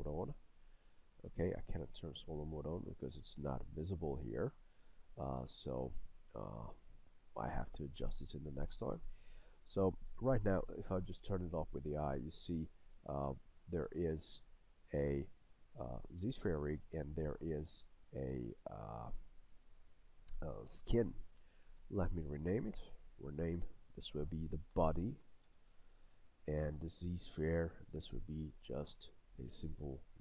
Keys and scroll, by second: 25.7 Return.